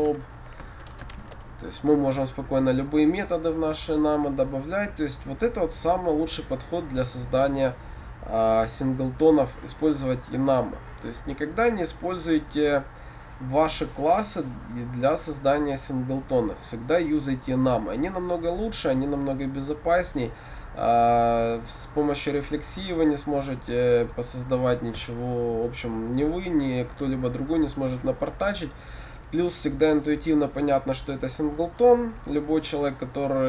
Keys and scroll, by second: 25.1 ctrl+/.